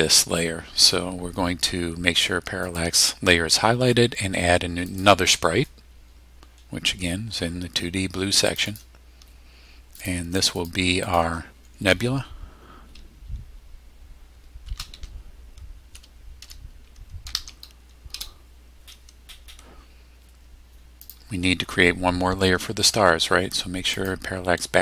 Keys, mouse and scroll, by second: 2.6 click, 4.9 click, 6.5-6.8 scroll up 2, 7.1-7.4 scroll up 1, 8.5 click, 9.9 click, 10.4 click, 11.0 click, 14.6-17.8 typing, 18.1 Return, 21.0 click, 23.9 click.